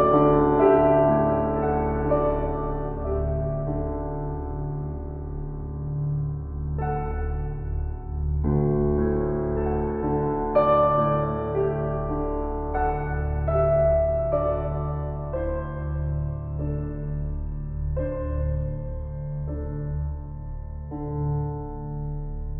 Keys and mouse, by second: 0.4 z, 1.5 click, 1.5 typing, 2.0 click, 4.5 click, 5.3 click, 6.5 click, 7.7 click, 8.3-9.0 typing, 8.5-11.8 drag, 11.6-12.4 typing, 11.9-18.2 drag, 18.2 typing, 18.3-20.9 ctrl+alt+shift+drag, 20.9 typing, 21.1-22.5 ctrl+alt+drag.